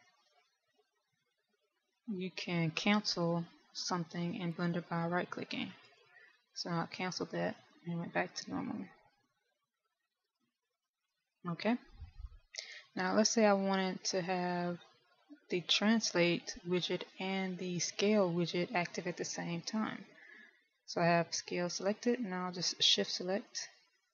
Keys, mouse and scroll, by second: 0.2 click, 22.2 click.